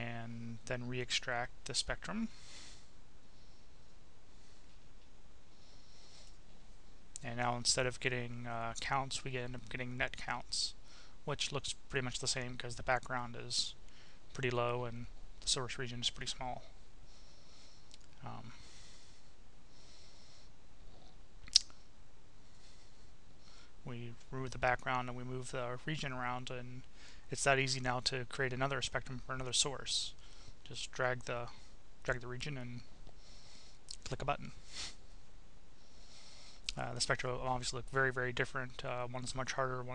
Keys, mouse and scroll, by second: 0.7 click, 2.7 click, 5.3 click, 7.3-10.5 drag, 10.7 click, 19.5 click, 20.4-21.9 drag, 22.1 click, 23.9 Delete, 25.4-27.3 drag, 28.1 click, 28.8 click, 32.2-34.1 drag, 35.0-37.2 drag.